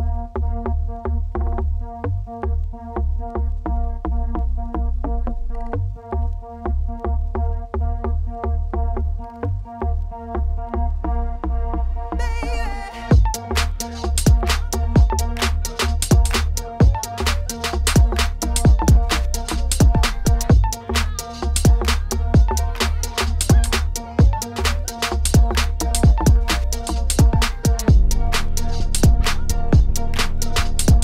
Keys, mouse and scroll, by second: 0.3 g, 1.1 Tab, 1.3 middle click, 1.6 scroll down 1, 1.7 middle click, 2.6-3.3 scroll up 2, 3.3-4.5 scroll down 1, 5.0 click, 5.2 shift+middle click, 5.4 Tab, 5.5 scroll up 2, 5.8 a, 6.1-9.3 shift+middle drag, 9.1 Tab, 11.2-13.3 drag, 13.7 shift+middle click, 13.9 click, 14.2 ctrl+shift+t, 18.2-20.7 middle drag, 20.9 Tab, 24.0-25.7 middle drag, 26.8 middle click, 28.5-29.7 drag, 29.7 a, 30.2 a.